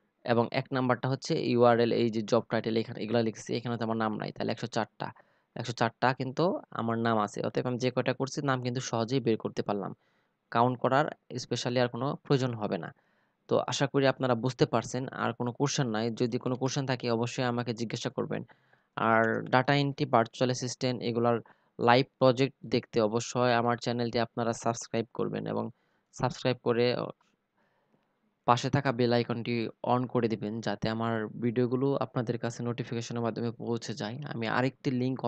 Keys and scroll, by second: 14.9 ctrl+c, 17.6 ctrl+v.